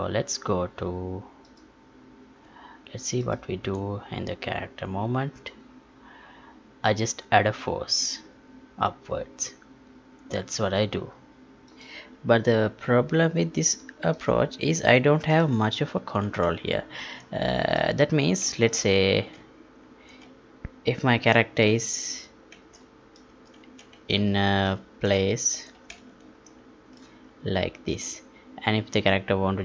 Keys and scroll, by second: 16.4 alt+Tab, 17.2 Tab.